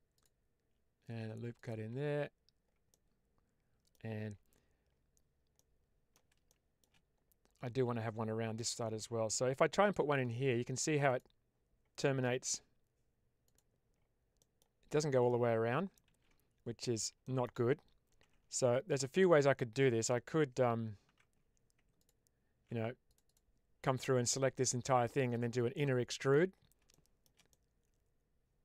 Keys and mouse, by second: 1.4 click, 1.9 Tab, 2.8-3.8 middle drag, 4.1 Tab, 5.4 middle click, 6.4 shift+middle click, 9.9 ctrl+r, 13.3 click, 14.3 middle click, 16.0 ctrl+z, 17.1 shift+middle click, 23.0 click, 25.6 middle click, 26.9 shift+middle click, 27.4-28.6 middle drag.